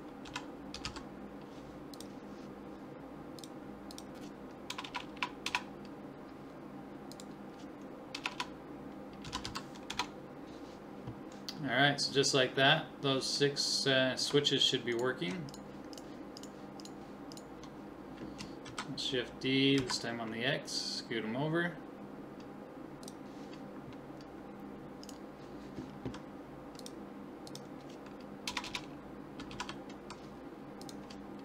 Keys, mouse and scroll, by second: 5.0 BackSpace, 5.2 BackSpace, 8.3 BackSpace, 14.9-19.1 right drag, 18.7 shift+d, 25.0 right click, 26.8-28.6 drag, 26.8 right click, 28.6 BackSpace.